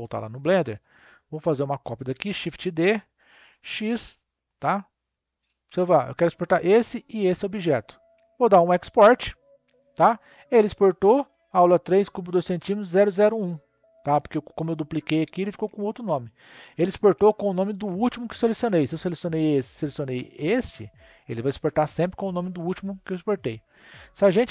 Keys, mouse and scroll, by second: 0.6 click, 1.1 click, 2.3 shift+d, 5.8 click, 6.9 shift+click, 9.2-12.3 drag, 18.2 click, 18.8 click, 19.4 shift+click, 20.3 shift+click, 22.8 click.